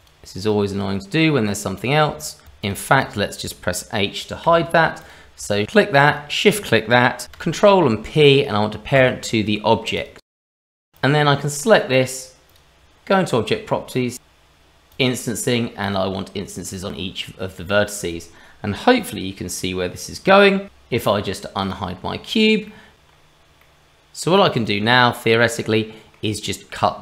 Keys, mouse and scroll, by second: 0.4 shift+click, 2.4 shift+click, 2.4 ctrl+z, 2.4 h, 2.6 click, 3.0 click, 4.4 h, 5.0 click, 6.1 shift+click, 7.4 ctrl+p, 9.9 click, 10.3 middle click, 10.9 click, 12.5 click, 13.1-13.8 scroll down 2, 14.9 click, 15.8 click, 16.4-16.9 scroll down 1, 20.6 ctrl+z, 21.6 click, 22.4 click, 22.6 middle click, 22.9 ctrl+z, 22.9 click, 23.1 scroll up 2, 23.6 middle click, 24.5 click, 25.6 middle click, 26.6-27.0 scroll down 1.